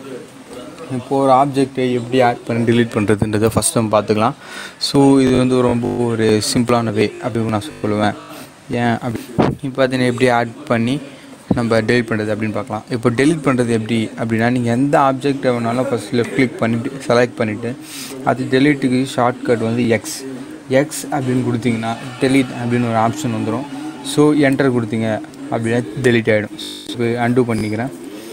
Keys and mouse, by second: 13.6 click, 16.1 click, 20.9 x, 24.3 Return, 27.2 ctrl+Return, 27.6 ctrl+z.